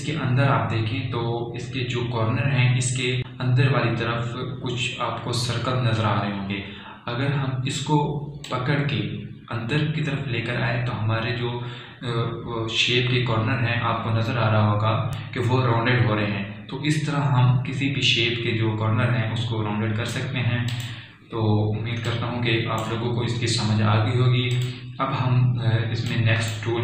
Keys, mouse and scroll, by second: 9.8-19.8 drag, 9.8 typing, 22.1-25.9 drag.